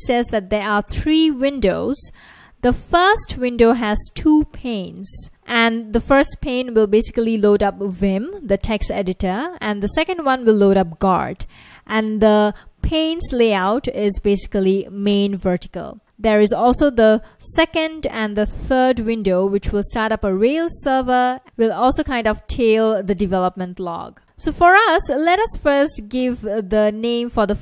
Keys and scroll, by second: 0.0 F1, 3.0 F1, 4.0 F1, 5.0 F1, 5.9 F1, 9.2 F1, 13.4 F1, 16.4 F1, 19.7 F1, 21.5 F1.